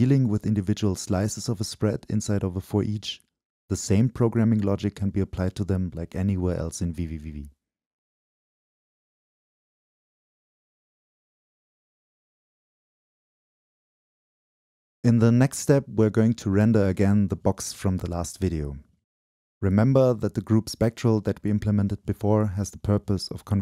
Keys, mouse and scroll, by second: 0.0-8.8 drag, 9.2-10.3 drag, 10.3 BackSpace, 11.3-12.3 drag, 12.4-15.2 shift+drag, 15.5-16.9 drag, 18.1-20.1 drag, 22.8-23.6 drag.